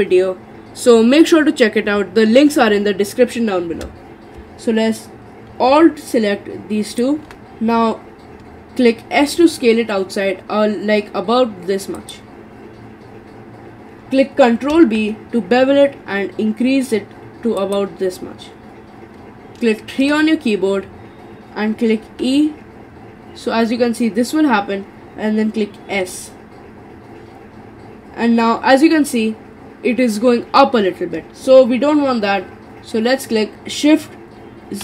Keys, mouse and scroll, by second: 6.9 alt+shift+click, 7.3-9.2 middle drag, 9.2 s, 14.8 ctrl+b, 20.0 3, 22.0 e.